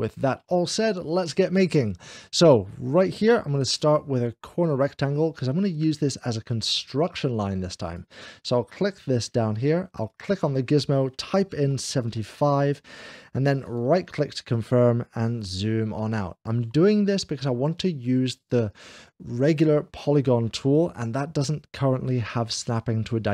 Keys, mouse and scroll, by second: 4.5 click, 6.0 click, 7.8 click, 9.9-12.5 drag, 11.5 7, 13.5-14.5 right drag, 14.3 scroll down 1, 16.0-17.1 shift+middle drag, 20.6 click.